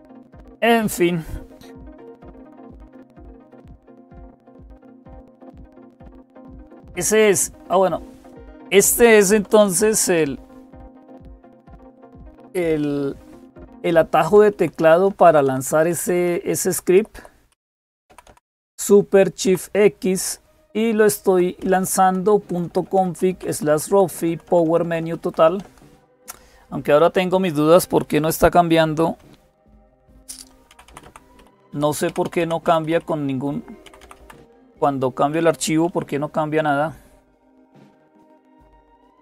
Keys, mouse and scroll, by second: 0.0-39.2 typing, 8.1 click, 10.5 ctrl++, 11.1 ctrl++, 11.3 ctrl++, 13.2 Up, 14.3 Up, 14.9 Down, 15.7 Down, 15.9 Down, 16.1 Down, 16.8 Up, 16.8 Down, 17.9 Up, 18.1 Up, 19.3 Up, 20.0 Up, 20.6 Down, 20.7 Down, 20.7-21.8 Left, 21.6 Down, 21.6 Up, 21.6 Left, 22.3 Right, 25.4 Right, 25.9 Right, 29.3 super+x, 30.5 Down, 30.7 Down, 30.8 Down, 31.2 Up, 31.3 Up, 31.5 Up, 31.9 Down, 32.8 Up, 33.8 Up, 34.2 Down.